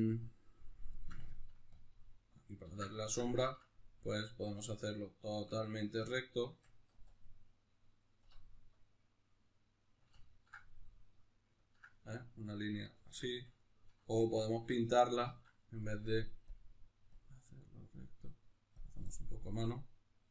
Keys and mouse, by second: 0.2 click, 2.0-3.0 drag, 2.7 ctrl+z, 3.0-8.2 shift+middle drag, 8.2-10.0 drag, 10.0-20.2 ctrl+middle drag, 13.2 alt+q, 15.3 ctrl+z, 20.2-20.3 drag.